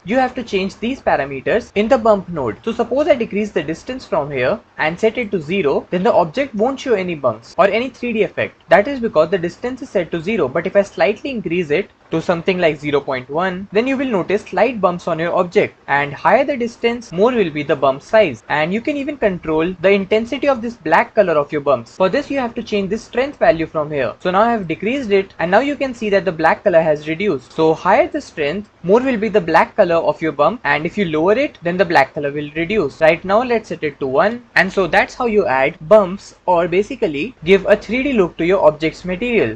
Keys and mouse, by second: 3.5-5.8 drag, 10.7-12.0 drag, 12.1-13.7 drag, 16.7 click, 23.5-24.9 drag, 27.5-28.7 drag, 33.5-34.5 drag.